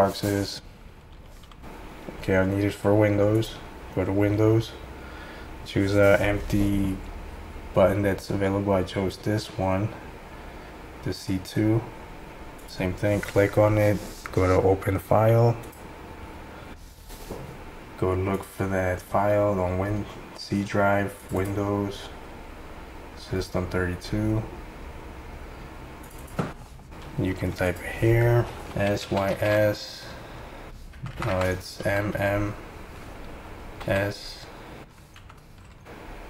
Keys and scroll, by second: 28.5-29.8 typing, 31.0-32.1 typing, 33.6-35.2 typing.